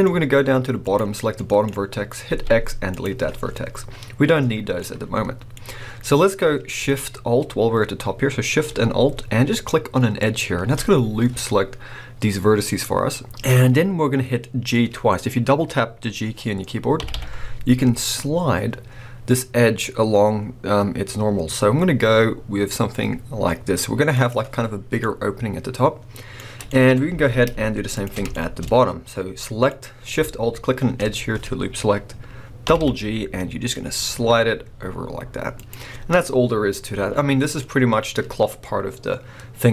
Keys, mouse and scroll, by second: 0.0 scroll up 1, 0.8 click, 1.3 middle click, 2.3 x, 4.8 middle click, 5.6 scroll up 1, 10.2 alt+shift+click, 13.6 scroll down 1, 17.0 g, 24.2 click, 24.5 scroll down 1, 25.0-26.9 middle drag, 26.9 scroll up 2, 27.2 alt+a, 28.0 alt+shift+click, 28.3 shift+middle click, 28.7 scroll up 1, 29.4 middle click, 32.7 g, 35.6 click, 37.3-37.6 scroll down 1, 37.6-39.7 middle drag.